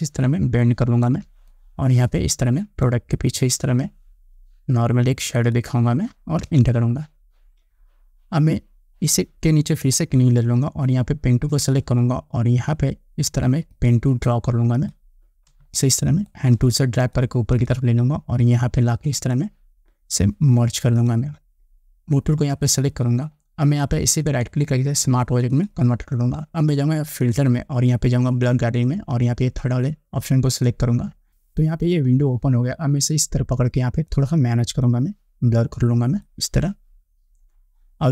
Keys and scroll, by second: 6.6 Return, 15.8 space.